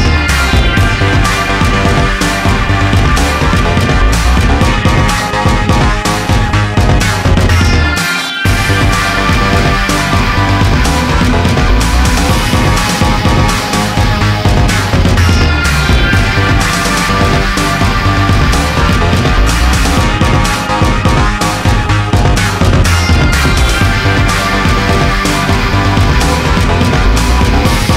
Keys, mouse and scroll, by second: 0.5 alt+click, 4.9 click, 5.2-6.0 scroll down 1, 6.8 click, 8.1 click, 8.5 click, 8.7 scroll down 1, 10.3 click, 10.4 click, 11.5 middle click, 11.8 middle click, 12.0 scroll up 1, 12.2 F3, 14.9-15.7 scroll down 1, 15.9 alt+middle click, 17.3-17.8 scroll up 1, 19.3 click, 20.0 z, 20.8 alt+middle click, 21.6 scroll up 1, 21.6 alt+middle click, 22.9 scroll up 1, 23.1 middle click, 24.5 middle click, 24.6 s, 26.3 click.